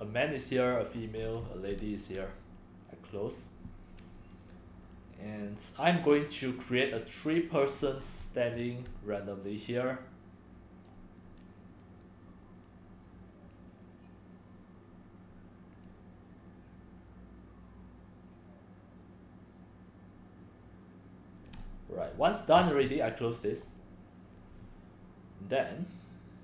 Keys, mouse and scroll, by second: 0.9 middle click, 0.9-1.4 scroll, 1.7 c, 2.1 right click, 2.1-6.7 drag, 6.9 scroll, 7.6 scroll up 4, 7.7-8.2 middle drag, 7.7-8.1 scroll, 8.2-8.6 typing, 8.8-9.9 drag, 11.5-19.3 drag, 21.6 click, 21.6-22.1 scroll up 8, 22.7 click, 23.6 click, 26.0 click.